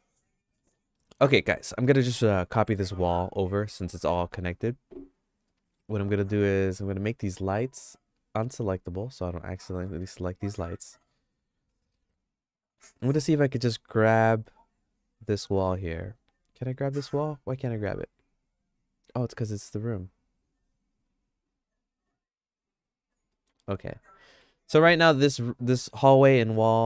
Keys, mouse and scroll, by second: 2.1 middle click, 2.9 middle click, 3.3 shift+middle click, 5.5 middle click, 8.8 click, 10.0 click, 10.6 middle click, 11.3 middle click, 11.7-12.8 shift+middle drag, 13.1 click, 13.7 click, 14.4 click, 15.7 click, 16.3 click, 17.6 click, 20.4 click, 22.0 click, 22.6 click, 23.3 middle click, 23.6 shift+middle click, 24.4 Tab, 25.1 middle click.